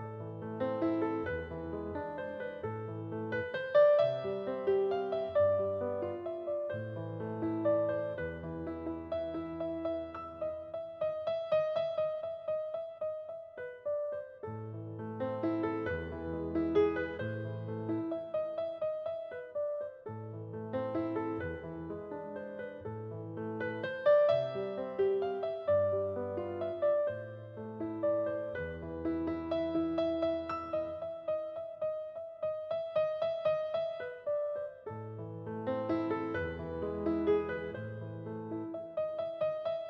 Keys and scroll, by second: 28.6 ctrl+s, 37.5 ctrl+s.